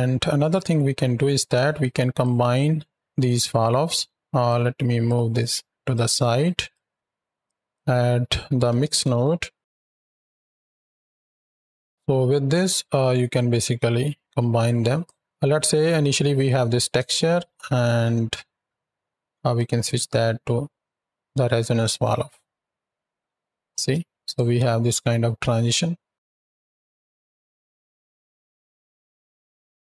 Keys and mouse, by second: 0.1-0.5 drag, 1.0-1.4 drag, 2.1-3.3 drag, 2.4-3.3 right drag, 3.6 drag, 3.6 right drag, 4.3 right click, 5.2 right drag, 6.0 drag, 6.6 right click, 7.3 click, 9.8-10.3 drag, 10.4-10.7 drag, 11.0 click, 11.3-11.9 drag, 13.1 shift+Right, 13.1 shift+Left, 13.1-15.0 drag, 15.2 shift+Right, 15.2 shift+Left, 16.9 space, 19.5-23.7 drag, 23.7 space, 24.1-24.5 drag, 24.5 space.